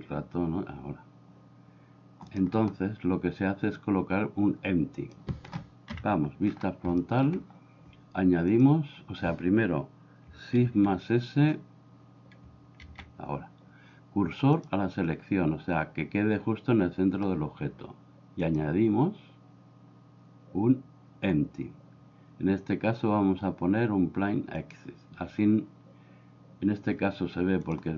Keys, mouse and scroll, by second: 3.9 click, 6.0 KP_1, 7.0 shift+middle click, 8.6 click, 10.7 shift+a, 12.9 shift+s, 18.5-24.8 drag, 27.7 click.